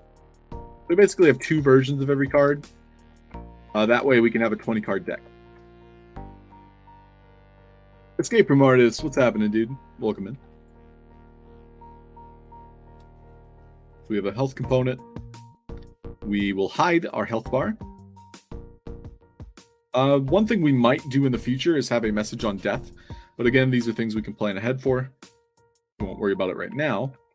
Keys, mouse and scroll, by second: 0.2 click, 2.8-4.4 typing, 4.7 click, 5.4 i, 6.1 click, 10.4 click, 12.9 alt+drag, 13.2 middle click, 13.8 click, 14.5 drag, 16.2 click, 16.9 click, 19.7 drag, 26.9 ctrl+d.